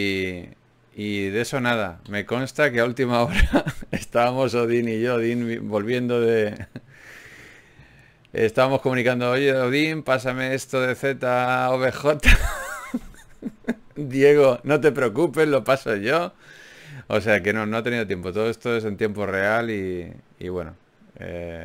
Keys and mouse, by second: 1.4-3.2 right drag, 2.2 f, 4.4-5.6 right drag, 5.4 g, 5.6 click, 7.0 ctrl+r, 8.6 g, 9.4 ctrl+Tab, 12.2 g, 13.0 g, 13.7 g, 15.1 g, 15.3 middle click, 16.2 ctrl+Tab, 18.8 f, 19.8-21.5 drag, 19.8 f.